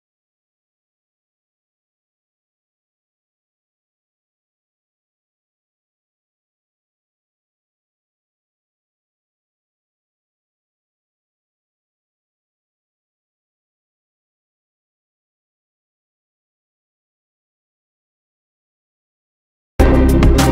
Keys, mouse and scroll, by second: 0.2-4.9 drag, 4.9-6.6 ctrl+drag, 6.6-11.7 ctrl+drag, 12.4-13.5 drag, 13.5-17.2 drag.